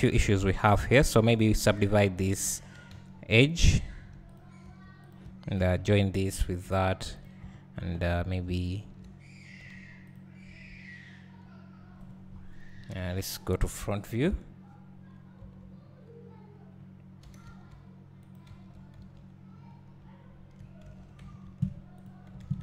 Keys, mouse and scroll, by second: 1.8 click, 2.9 2, 3.4 click, 4.3 right click, 4.6 1, 5.1 click, 5.6 shift+click, 6.6 j, 7.2 click, 8.7 shift+click, 9.6 j, 10.1 click, 14.3 KP_1, 17.4 g, 18.3 click, 20.0 `, 21.9 z, 22.0 click.